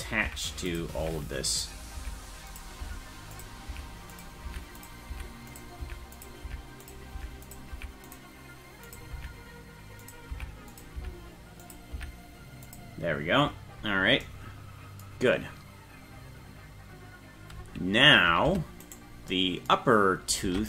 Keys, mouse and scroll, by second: 0.2 Up, 0.7 click, 1.0 Up, 1.5 click, 2.0 Up, 2.5 click, 2.8 Up, 3.3 click, 3.7 Up, 4.1 click, 4.5 Up, 4.8 click, 5.1 Up, 5.5 click, 5.8 Up, 6.1 click, 6.5 Up, 6.8 click, 7.2 Up, 7.4 click, 7.7 Up, 8.1 click, 8.9 click, 9.2 Up, 10.0 click, 10.3 Up, 10.7 click, 11.0 Up, 11.6 click, 11.9 Up, 12.7 click, 18.5 Tab, 18.9 right click, 20.5 ctrl+Tab.